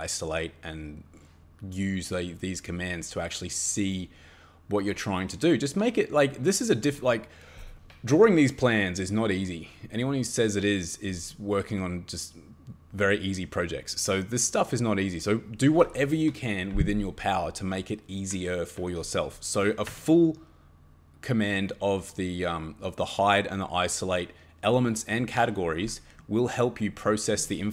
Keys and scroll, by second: 19.9 Escape.